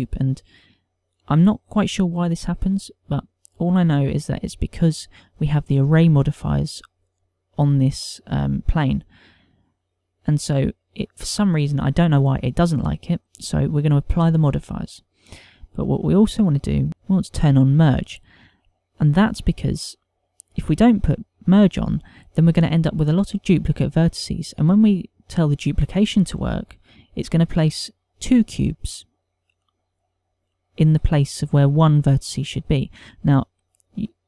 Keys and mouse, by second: 4.9 click, 14.5 click, 15.2 click, 17.3 click, 18.6 click.